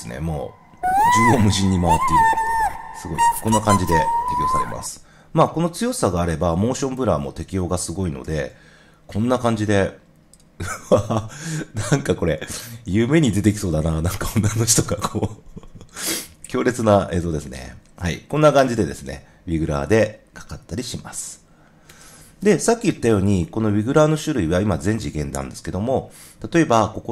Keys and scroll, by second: 4.5 0, 8.2 0, 18.5 0, 21.8 0, 22.8 super+0, 22.8 super+z.